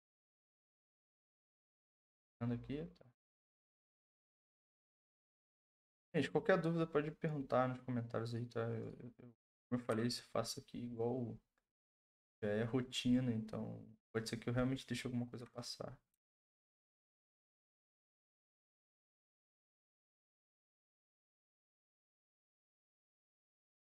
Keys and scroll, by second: 0.3 ctrl+z.